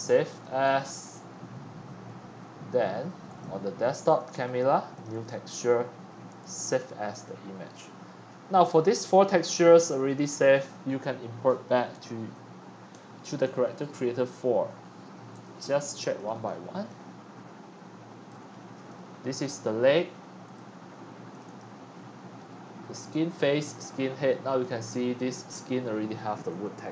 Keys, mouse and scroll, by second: 0.6 click, 3.2 click, 4.1 click, 4.9 click, 5.1 click, 6.3 click, 7.1-7.5 drag, 7.6 click, 10.0 click, 10.2 click, 12.9 Right, 13.6 Right, 14.0 Left, 15.5-17.0 drag, 17.6 Left, 18.3 Left, 20.6 drag, 21.6 click, 24.6-26.4 middle drag, 24.6-25.3 scroll up 16, 26.4 scroll, 26.8-26.9 drag.